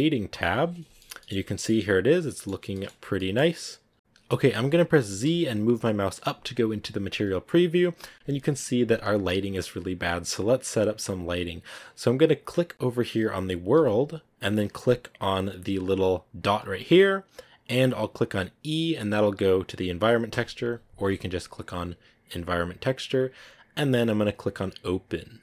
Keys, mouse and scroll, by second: 0.3 click, 3.9 z, 10.8 scroll up 1, 15.8 click, 21.6 click.